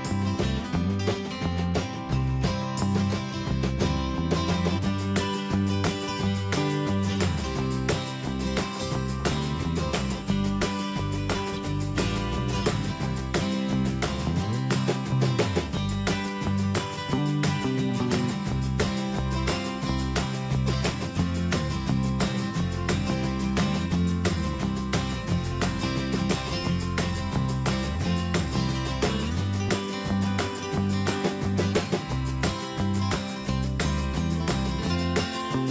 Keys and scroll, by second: 15.3 ctrl+t, 17.4 Return, 18.5 ctrl+t, 20.2 Return, 23.3 ctrl+Return, 26.6 Down, 27.3 Return.